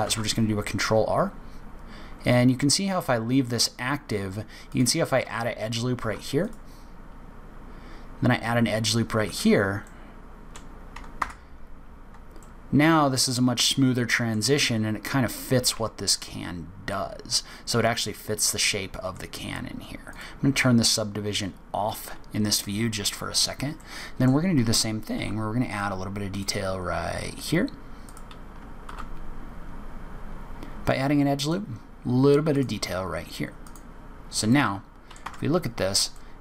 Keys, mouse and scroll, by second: 0.0 ctrl+r, 5.9 ctrl+r, 9.8 middle click, 11.1 Tab, 12.3 middle click, 14.5-15.3 scroll down 2, 15.3-15.7 scroll up 1, 15.7 Tab, 16.8 middle click, 18.1-18.5 scroll up 3, 18.5 middle click, 20.0 click, 23.7 middle click, 25.1 ctrl+r, 28.8 ctrl+r, 33.6 click, 34.4 middle click, 35.2 Tab, 35.6-36.4 scroll down 4, 36.1 middle click.